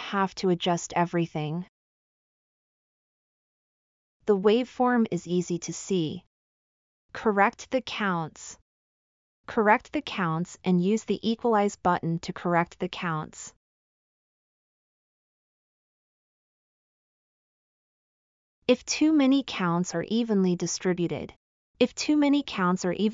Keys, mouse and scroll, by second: 1.5-1.8 drag, 11.1 click, 22.6 drag.